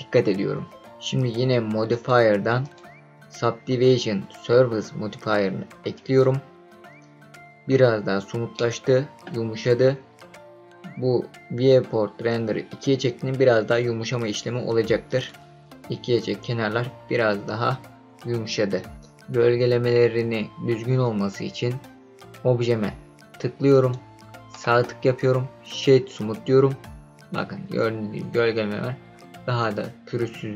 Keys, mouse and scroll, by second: 1.9 click, 2.6-6.4 drag, 7.9-8.5 scroll up 3, 8.5-8.9 middle drag, 8.9 click, 15.0 click, 23.7 click, 24.6 right click.